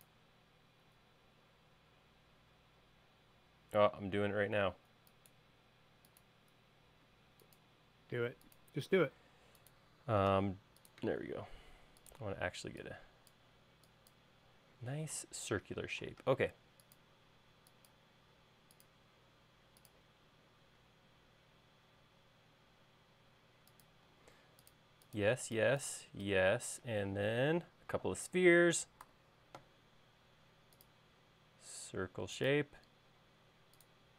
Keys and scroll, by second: 4.3 l, 8.4 l, 10.8 c, 12.9 e, 16.4 l, 24.6 |, 25.8 e, 29.6 c.